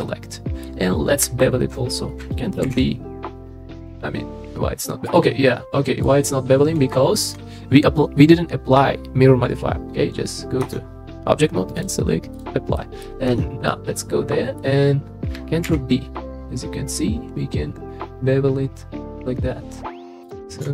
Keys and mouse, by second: 0.0 middle click, 2.6 ctrl+b, 5.1 middle click, 6.9 shift+middle click, 10.6 Tab, 11.8-12.4 drag, 12.8 middle drag, 13.3 Tab, 13.7 middle click, 15.6 ctrl+b.